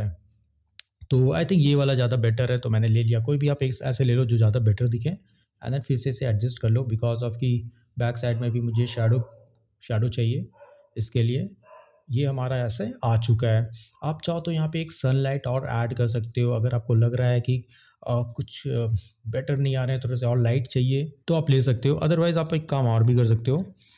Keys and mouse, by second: 5.4 click.